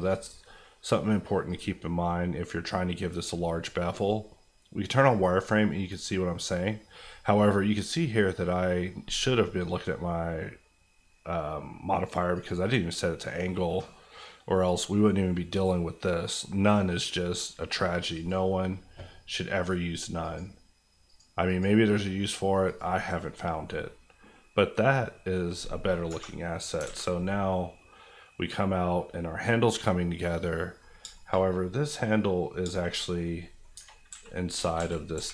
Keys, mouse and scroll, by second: 8.6-11.9 scroll down 1, 12.3 click, 23.0 scroll down 1, 23.6-25.5 middle drag, 26.0 KP_Divide, 26.8 alt+a, 26.9 alt+scroll down 2, 27.2-30.8 middle drag, 30.8-31.8 scroll up 4, 31.1 shift+middle click, 31.8 click, 32.0 middle click, 32.6 shift+middle click, 32.9 shift+scroll up 1, 33.2 middle click, 33.7 Tab, 34.1-35.1 typing.